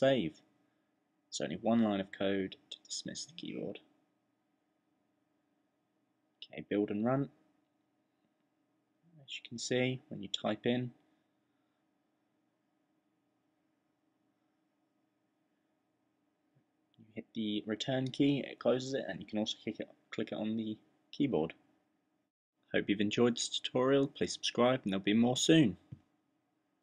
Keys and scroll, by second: 0.9-1.6 typing, 2.7-3.4 typing, 12.3-14.5 typing, 15.8-19.6 typing.